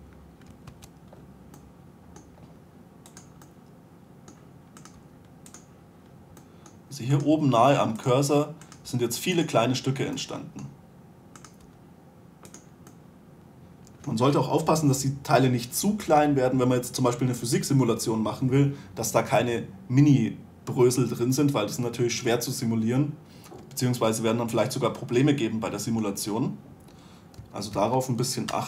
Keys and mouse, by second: 1.3 2, 2.6-4.0 right drag, 2.7 g, 5.3 right click, 5.5 g, 9.4 g, 12.1 g, 28.0 a, 28.3 a.